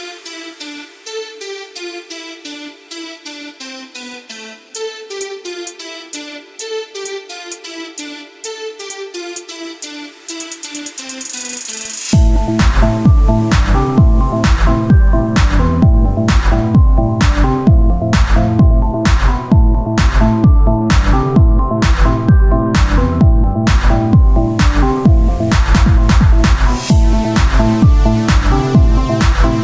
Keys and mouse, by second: 4.6 g, 6.4-9.2 middle drag, 7.7-11.7 drag, 7.7-9.2 right drag, 11.7 Tab, 17.5 Tab, 17.5 shift+d, 20.5 KP_1, 21.5 z, 22.0 Tab, 23.2 c, 24.7 z, 27.5 Tab.